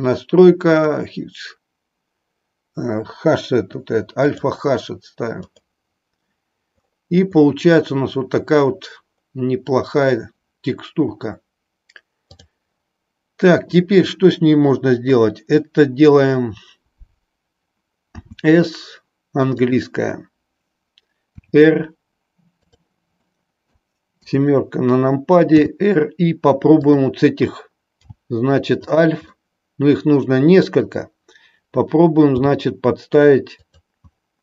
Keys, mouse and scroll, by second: 18.2 s, 21.2 r, 22.7 click, 23.4 middle click, 24.1 KP_7, 25.5 r, 26.9 click, 28.0 g, 28.9 click, 29.3-31.0 middle drag, 32.4 g.